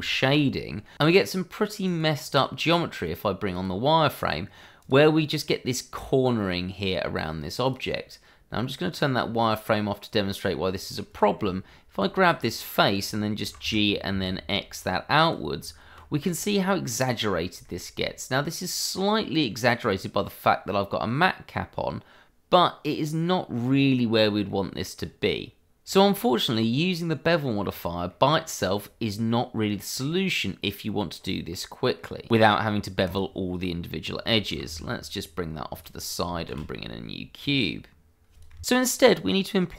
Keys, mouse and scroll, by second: 0.6-1.0 scroll up 1, 1.0 middle click, 1.2 shift+middle click, 1.3 middle click, 1.4 shift+middle click, 1.4-2.8 scroll up 1, 2.9 click, 4.5 scroll down 1, 4.8 click, 7.6 click, 9.2-9.7 scroll down 1, 9.7 middle click, 11.1 click, 12.0 Tab, 12.2 click, 12.4 middle click, 13.4 g, 13.6 y, 14.1 x, 15.2 click, 15.6 Tab, 16.1 click, 16.5 middle click, 17.6 shift+middle click, 17.6 middle click, 17.9-18.4 scroll up 1, 18.4 middle click, 19.7-20.1 scroll up 1, 20.1 middle click, 23.6-24.1 scroll down 1, 24.4 middle click, 24.9-25.7 scroll up 1, 26.1 middle click, 27.6-28.0 scroll down 1, 28.0 middle click, 28.5 click, 29.9-30.3 scroll up 1, 30.3 middle click, 34.8 click, 35.1 g, 35.5 click, 35.6 shift+a, 35.9 click, 36.2 Escape, 36.8 shift+a, 36.9 click, 37.4 scroll down 1, 37.7 s, 37.8 click, 37.9 ctrl+a, 38.1 click, 38.2 middle click, 38.3 click.